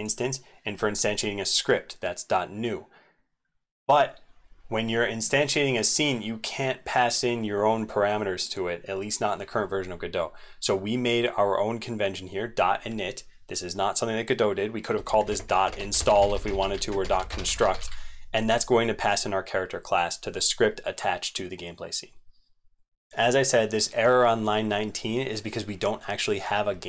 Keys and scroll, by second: 15.3 ctrl+BackSpace, 15.7 ctrl+BackSpace, 17.0 ctrl+BackSpace, 22.6 ctrl+a.